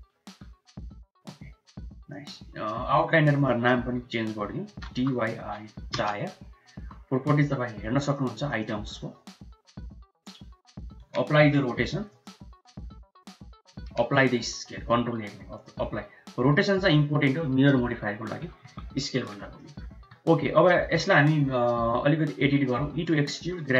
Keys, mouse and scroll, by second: 0.1 s, 3.1-6.0 drag, 6.7 n, 7.9 click, 8.5 click, 11.2 ctrl+a, 13.8 ctrl+a, 18.9 middle click, 19.4 middle click, 19.8 Tab, 20.5 middle click, 20.9 Tab, 21.4 Tab, 22.6 e, 23.5 g.